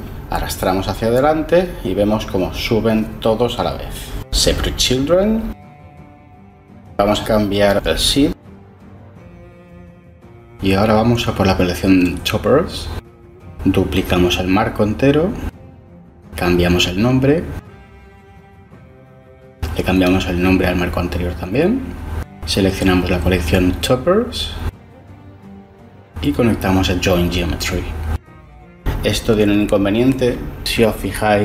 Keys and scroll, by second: 14.5 shift+d, 16.5 F2, 18.0-19.6 typing, 19.7 Return, 20.5 Tab, 20.6 F2, 21.0-22.3 typing, 22.3 Return.